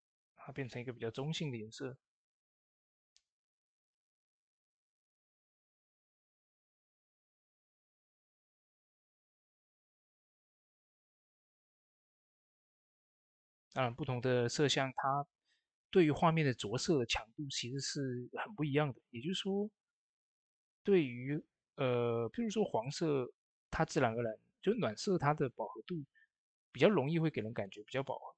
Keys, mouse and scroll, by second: 25.0-28.3 drag.